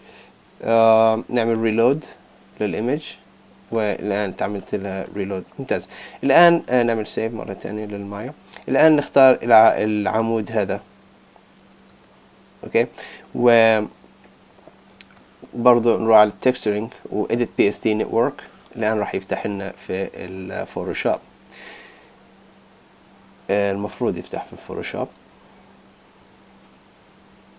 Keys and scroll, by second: 7.2 super+s, 20.2 super+Tab.